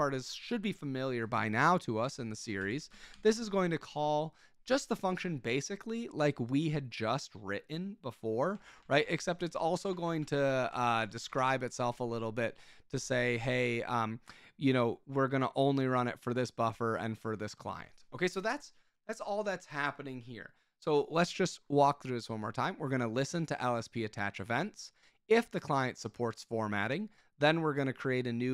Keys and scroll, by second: 0.0-0.4 typing, 2.0 Escape, 2.6 k, 2.9 shift+v, 3.1 Escape, 8.4-11.9 typing.